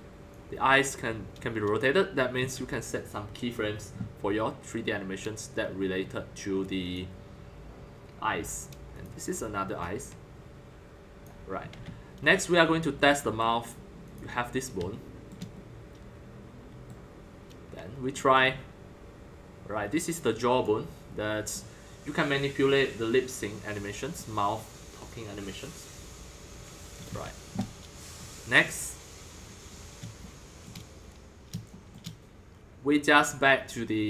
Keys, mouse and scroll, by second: 2.2 ctrl+click, 2.4 ctrl+z, 6.8 click, 7.0-8.3 drag, 8.9 click, 9.8 click, 11.0-11.7 drag, 11.7 ctrl+z, 12.0-12.9 middle drag, 13.5-14.1 middle drag, 14.1-15.3 drag, 15.3-20.6 shift+middle drag, 20.6 click, 21.5-27.0 middle drag, 27.0 ctrl+z, 28.1 scroll, 29.3-31.0 middle drag, 31.8 shift+middle click, 33.3-34.0 middle drag.